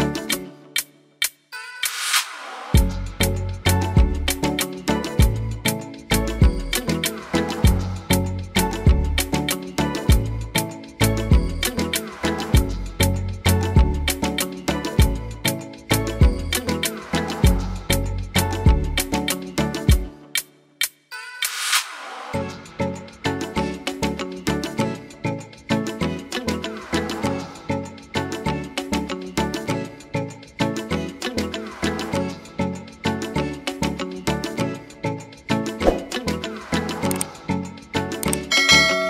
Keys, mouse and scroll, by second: 2.8 middle click, 6.7 click, 7.0-7.9 scroll up 3, 7.2 shift+middle click, 7.9 middle click, 9.5 click, 9.8 click, 10.3 click, 11.3 click, 12.4 click, 13.5 click, 13.8 click, 14.4 middle click, 14.8 scroll down 1, 15.7-16.1 scroll down 6, 15.7 e, 19.5 g, 20.8 middle click, 22.7 g, 24.4 middle click, 25.8 Tab, 26.1 right click, 26.7 middle click, 27.2 Tab, 27.4 middle click, 27.9 Tab, 28.6 scroll down 1, 29.1 scroll down 8, 29.7 middle click, 30.6 ctrl+z, 30.9 ctrl+z, 31.1 ctrl+z, 32.1 ctrl+s, 32.4 scroll down 4, 32.6 middle click, 33.0 shift+middle click, 33.2-34.2 shift+scroll down 6, 33.4 shift+middle click, 34.0 shift+middle click, 35.6 click, 35.9 click, 36.7 click, 38.2 click.